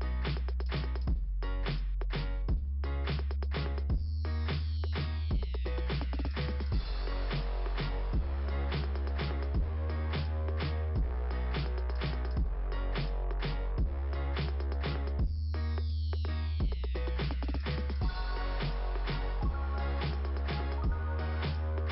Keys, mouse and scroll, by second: 0.8 scroll up 2, 2.4 scroll down 2, 4.6 click, 6.0 click, 9.2 click, 10.7 click, 12.8 click, 14.6 click, 18.0 click.